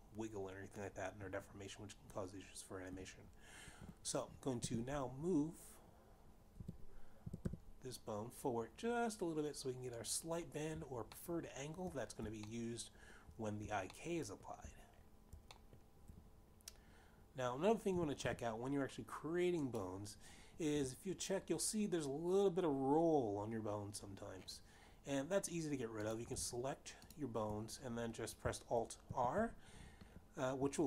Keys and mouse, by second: 5.0 g, 7.9 y, 8.0 y, 10.6 click, 11.9 shift+middle click, 13.1 shift+middle click, 14.6 shift+middle click, 16.2 shift+middle click, 18.5 g, 18.8 y, 19.9 click, 26.9 click, 27.7 shift+click, 29.9 alt+r.